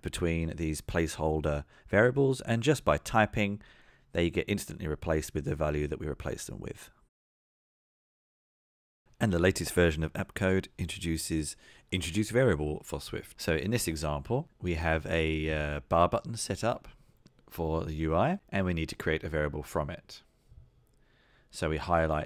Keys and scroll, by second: 2.5 Tab, 2.5 Tab.